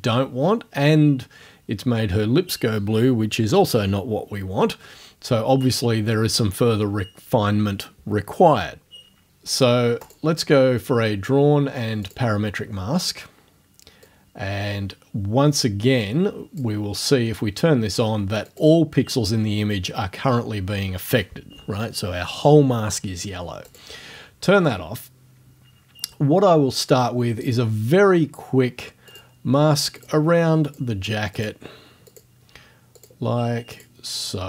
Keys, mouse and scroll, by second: 10.1 click, 12.1 click, 14.1-16.8 drag, 18.5 click, 23.7 click, 27.5 click, 29.1 click, 30.0 click, 30.7 click, 31.4 click, 32.1 click, 33.0 click, 33.8 click.